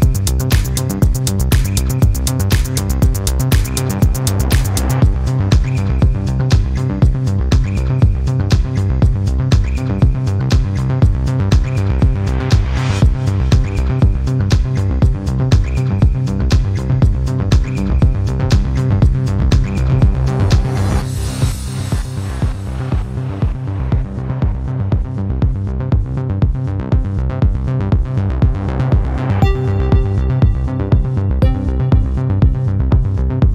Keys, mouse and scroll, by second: 3.1 click, 4.0 click, 13.6 click, 15.4 click, 16.6 click, 21.8 click, 24.9 click, 25.5 click, 29.7 click, 30.8 click, 32.0 0, 32.4 click, 32.8 0.